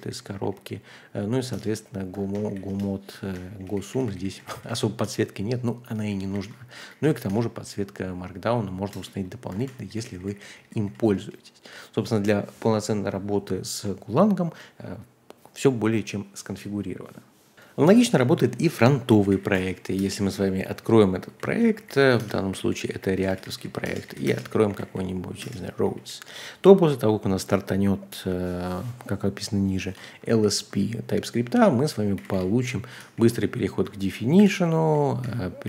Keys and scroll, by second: 0.0-5.0 typing, 2.3 ctrl+h, 3.2 ctrl+h, 6.1-6.5 typing, 6.3 ctrl+h, 6.9 ctrl+d, 7.3 Return, 8.9-11.2 typing, 9.6 ctrl+h, 11.2 Return, 17.3-17.7 typing, 17.7 Page_Down, 17.7 Tab, 17.7 Return, 19.2-25.8 typing, 30.3 ctrl+d, 30.8-33.5 typing, 34.4 ctrl+o, 34.6-35.6 typing.